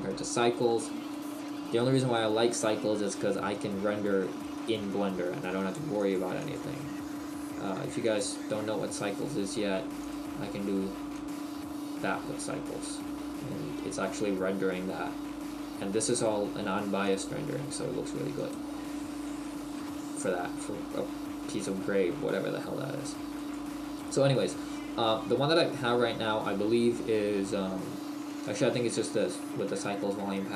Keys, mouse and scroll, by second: 10.0 click, 12.4 middle click, 17.2 click, 19.9 middle click.